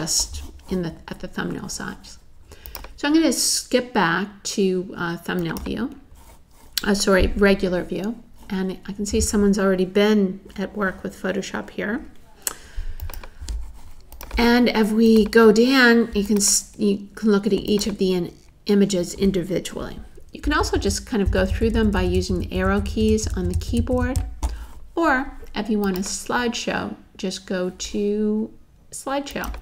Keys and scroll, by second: 20.4 Down, 21.6 Down, 22.7 Down, 23.6 Down.